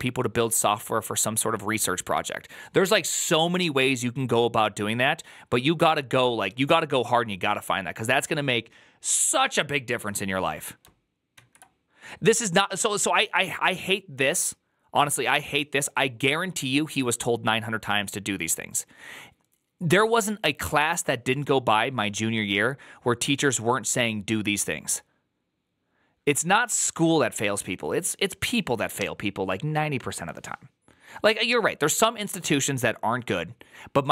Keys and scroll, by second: 11.2 alt+[.